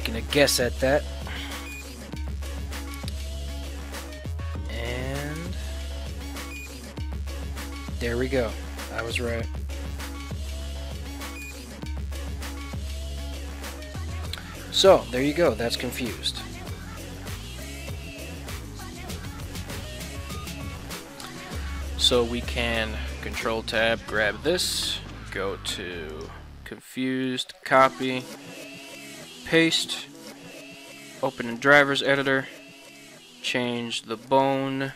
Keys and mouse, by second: 1.5 right click, 2.1 ctrl+Tab, 2.3 right click, 3.5 right click, 4.4 r, 6.6 r, 18.4 right click, 22.7 ctrl+Tab, 23.3 right click, 26.2 right click, 28.2-29.4 right drag, 30.3-31.7 right drag.